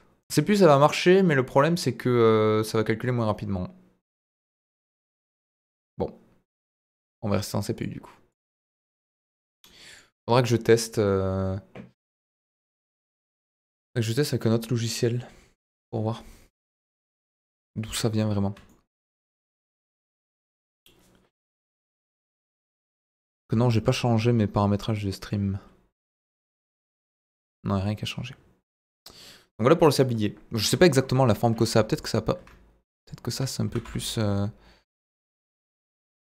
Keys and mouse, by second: 0.3-5.2 middle drag, 7.7 click, 10.2 click, 16.8-17.3 middle drag, 17.9 KP_1, 31.1 Tab, 32.0 click, 33.6 s, 33.8 z.